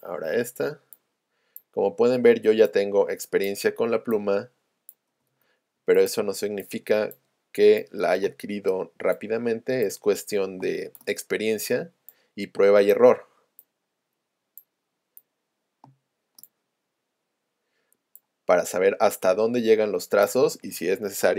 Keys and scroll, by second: 8.3 space, 10.6 space, 15.9 space.